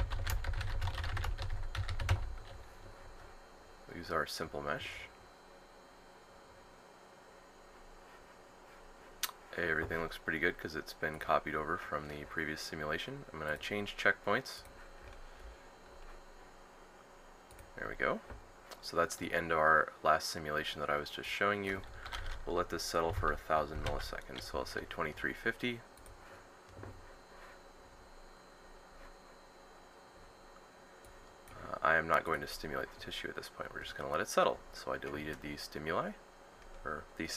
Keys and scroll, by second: 0.0-1.1 typing, 3.0 typing, 22.8-23.9 typing, 25.8 typing.